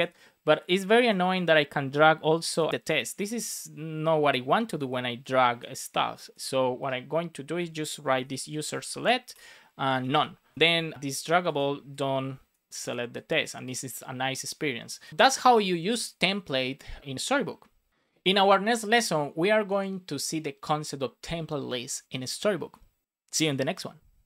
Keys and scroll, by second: 9.2 Return, 10.5 super+s.